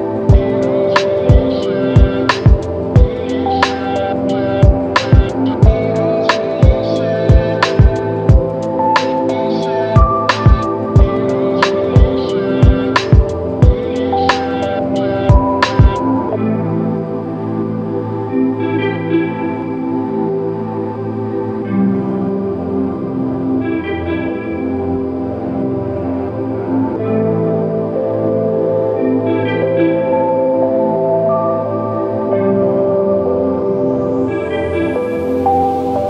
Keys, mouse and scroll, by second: 5.1 alt+click, 7.3 alt+click, 16.6 ctrl+click, 19.3 ctrl+click, 34.3 alt+click.